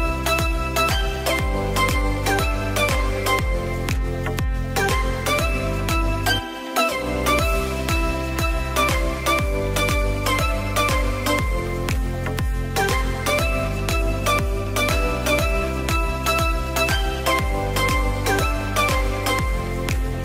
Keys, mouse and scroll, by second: 0.3 shift+click, 1.1 shift+click, 1.5 click, 2.4 click, 3.0-3.5 scroll up 1, 3.5-6.2 shift+middle drag, 7.3 shift+click, 8.8 alt+e, 11.7 click, 12.2 click, 13.1 s, 17.7 click, 19.2 click.